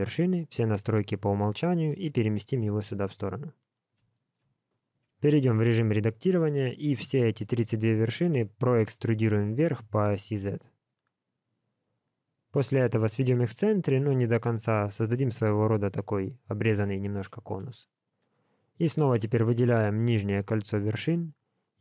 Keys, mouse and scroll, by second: 4.1 shift+middle click, 4.5 scroll up 5, 5.3 Tab, 18.3 middle click, 19.1 alt+click.